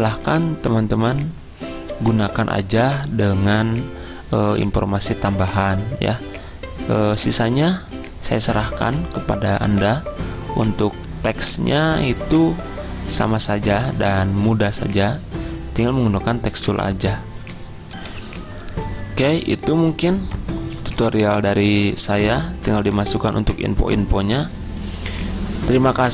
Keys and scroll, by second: 18.0 F10, 18.1 alt+Tab, 20.0 z.